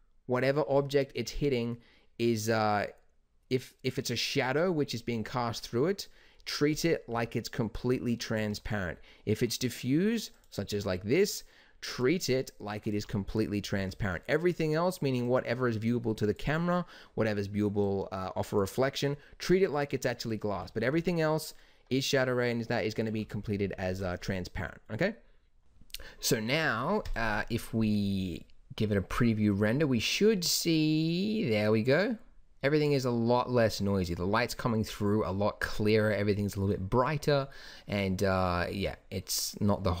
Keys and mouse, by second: 7.0 g, 12.9 g, 20.5 g, 23.1 KP_0.